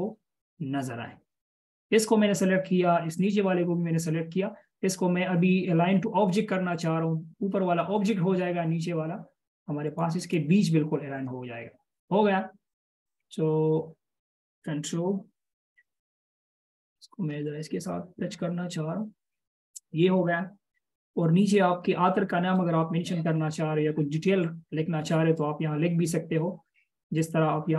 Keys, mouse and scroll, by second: 3.6 shift+click, 10.5 double click, 15.7 space, 19.6-20.0 scroll down 1, 21.0-21.4 alt+shift+scroll down 1, 21.9-22.4 alt+shift+scroll up 1, 22.4-22.9 alt+shift+scroll down 1, 23.6-24.1 scroll up 1.